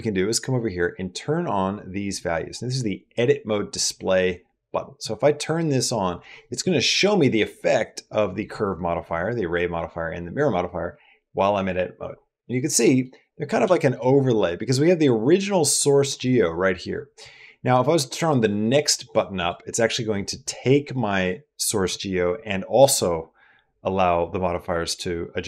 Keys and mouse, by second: 4.8 click, 12.6 middle click, 13.6 shift+click, 13.7 shift+middle click, 14.2 middle click, 16.0 click, 18.4 click, 18.9 click, 19.2 click, 19.9 middle click.